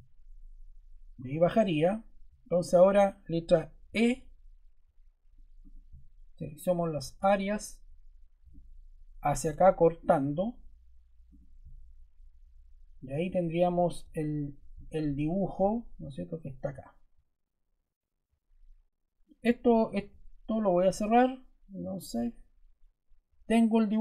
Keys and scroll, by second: 3.8 e.